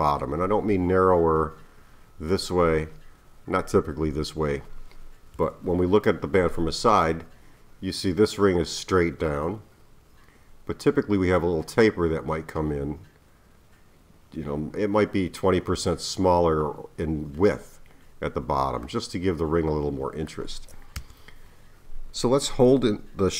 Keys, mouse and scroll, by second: 5.3 KP_3, 18.8-21.0 middle drag, 21.0 KP_1.